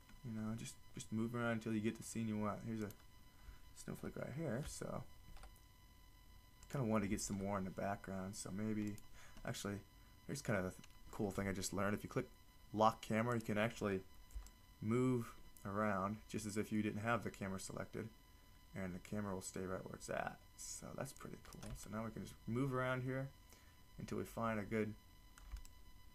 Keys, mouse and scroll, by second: 3.3-5.2 drag, 6.4 shift+f, 6.9-8.1 drag, 7.6 shift+f, 14.7-15.6 drag.